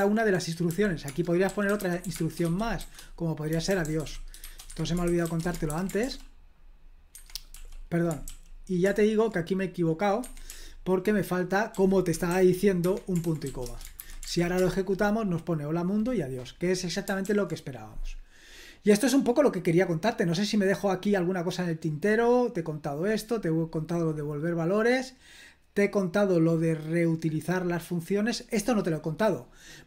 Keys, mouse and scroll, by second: 0.0 super+l, 0.7-5.5 typing, 5.7 super+h, 6.0 ctrl+p, 7.1 Escape, 7.5 l, 8.2 super+k, 8.8 super+l, 10.2 Escape, 10.5 l, 11.7-13.5 typing, 12.8 Escape, 13.6 Return, 14.0 super+h, 14.2 ctrl+p, 14.6 Return, 17.2 super+l, 18.6-21.7 scroll down 1, 21.8-24.1 scroll down 1, 24.5-25.3 scroll down 1, 25.7-26.3 scroll down 1, 26.4-26.9 scroll up 1, 29.4 click.